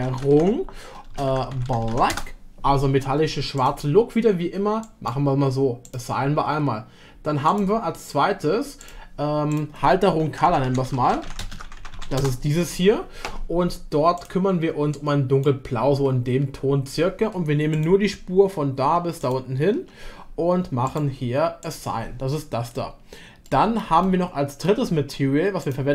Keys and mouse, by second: 3.6 click, 7.5 click, 8.8 click, 9.6-12.8 drag, 14.2 click, 17.8 click, 19.1 ctrl+click, 20.8 click, 23.4 middle click, 24.0 shift+middle click.